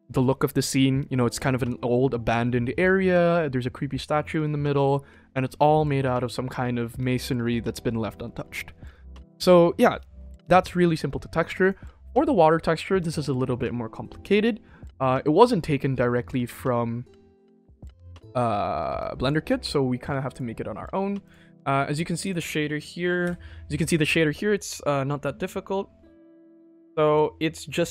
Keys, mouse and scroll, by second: 11.5 click, 18.0-19.2 drag, 20.2-21.2 drag, 22.4 scroll down 1, 22.5 click, 23.2 n, 24.2 middle drag, 25.7-26.7 scroll up 1, 26.7 middle click, 26.7 scroll up 4.